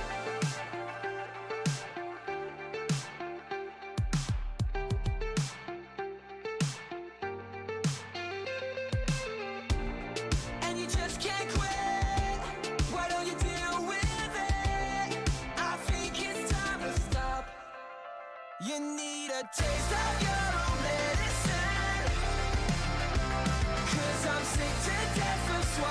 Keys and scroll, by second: 2.8-4.4 typing, 15.1-16.6 typing, 22.3 s.